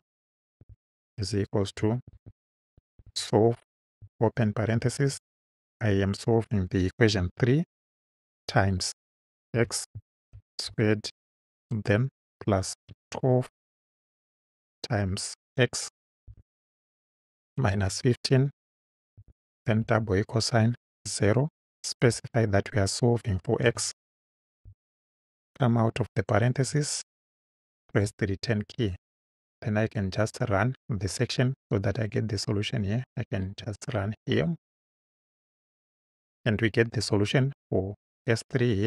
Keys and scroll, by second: 0.6 =, 1.6-3.5 typing, 4.8 shift+9, 7.1 3, 8.5 shift+8, 9.6 x, 10.2 shift+6, 10.7 shift+2, 11.3 2, 12.8 |, 13.1 2, 14.6 shift+8, 16.3-19.2 typing, 20.8 0, 22.1 ,, 23.7 x, 24.7 Right, 26.7 Right, 28.0 Return.